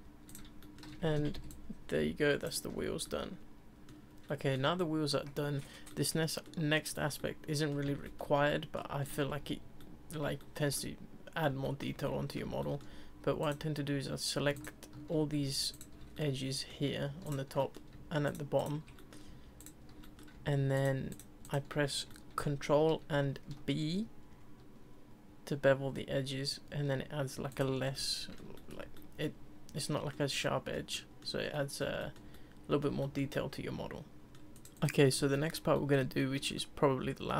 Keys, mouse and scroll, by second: 0.3 click, 0.6-1.4 shift+middle drag, 1.1 ctrl+c, 1.4 ctrl+v, 1.5 ctrl+click, 1.5-2.5 middle drag, 3.0-4.1 middle drag, 4.3-9.0 middle drag, 9.0 click, 9.3 Tab, 9.8-13.4 middle drag, 13.4 click, 14.5 alt+click, 15.7 shift+click, 16.1-17.2 middle drag, 17.2 shift+click, 17.6 middle click, 18.2 shift+click, 18.6 shift+click, 18.7 middle click, 19.1 middle click, 19.6 shift+click, 20.0 middle click, 20.7 shift+click, 21.1 shift+click, 21.4 shift+click, 22.1-23.0 middle drag, 23.0 ctrl+b, 27.7 Tab, 27.9-34.5 middle drag, 34.5 click, 34.8-37.3 middle drag.